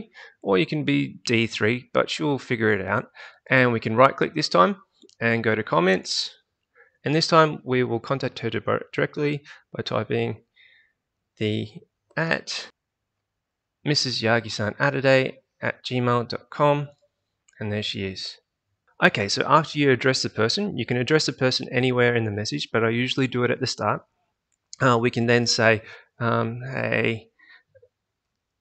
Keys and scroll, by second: 7.0 BackSpace, 11.8-13.2 typing, 26.2-27.2 typing, 28.2-28.6 typing.